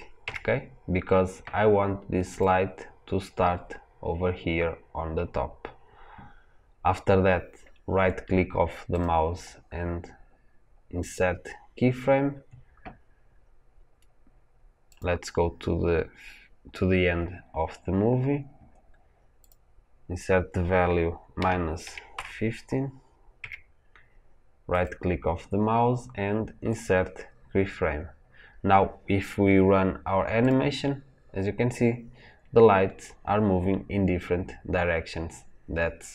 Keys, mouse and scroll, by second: 0.1 KP_Enter, 2.2 click, 11.0-14.9 right drag, 14.9 click, 23.3 KP_Enter, 26.7-30.4 right drag.